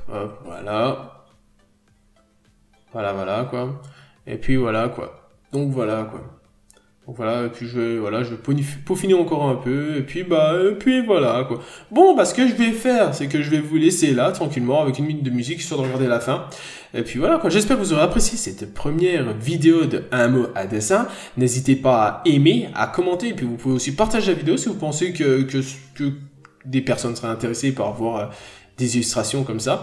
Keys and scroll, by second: 0.1 b, 6.3-6.7 scroll down 1, 7.0 scroll up 1, 7.1 n, 7.8 b, 11.4 n, 15.4 n, 17.4-17.7 scroll down 1, 17.7 n, 17.9-18.3 scroll up 1, 18.6-19.2 scroll down 1, 20.4 n, 20.6 scroll down 1, 22.4 scroll up 1, 25.5 b.